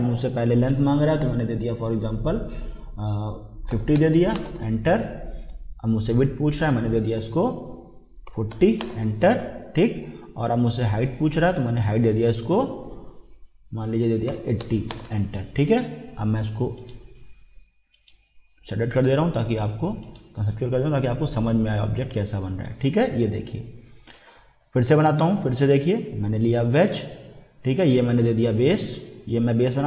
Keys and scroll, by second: 3.5-4.5 typing, 8.1-9.0 typing, 14.3 8, 14.6 0, 14.9 Return.